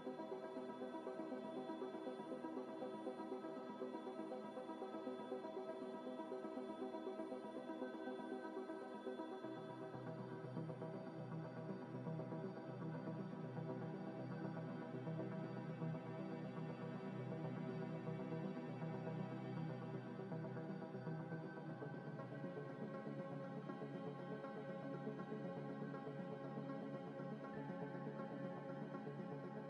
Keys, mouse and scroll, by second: 0.0 Tab, 0.8 g, 0.9 z, 2.2 double click, 2.5 g, 2.6 z, 4.1 g, 4.2 x, 4.5 y, 6.3 g, 6.4 x, 6.8 y, 7.8 scroll up 1, 8.6 Tab, 9.0 ctrl+a, 9.5 ctrl+a, 10.3 ctrl+a, 10.3 ctrl+a, 14.1 scroll up 1, 14.4 middle click, 15.9 Tab, 16.6 Tab, 17.5 z, 17.9 z, 18.1 z, 19.1 ctrl+b, 19.7-20.7 scroll up 1, 20.7 double click, 21.5 ctrl+v, 21.9 Escape, 22.3 ctrl+b, 23.2 double click, 24.2 ctrl+b, 26.2 ctrl+b, 27.3 Tab, 28.3 g, 28.5 x, 29.1 ctrl+z, 29.5 ctrl+z.